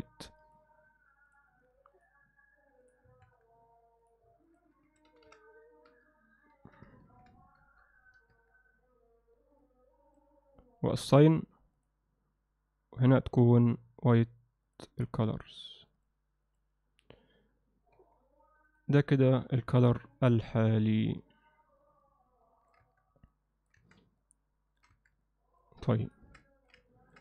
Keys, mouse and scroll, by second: 0.4 click, 1.3 click, 2.0 click, 3.3 Tab, 4.5-7.9 drag, 8.3 Tab, 9.7 click, 11.0 click, 11.8 click, 13.1-14.2 drag, 14.7 click, 18.0 Tab, 19.3 click, 20.2-22.7 alt+middle drag, 22.9 Tab, 23.4 alt+middle click, 23.8 Tab, 24.2 alt+middle click, 25.0 Tab, 25.3 middle click, 26.0 middle click, 26.4 alt+middle click, 26.9 ctrl+middle click.